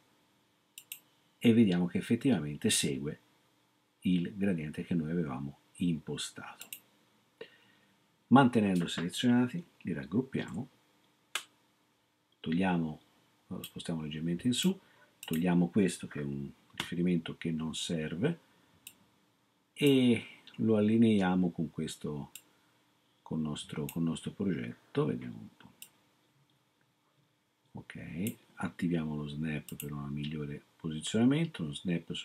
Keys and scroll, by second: 10.5 ctrl+g, 16.8 BackSpace.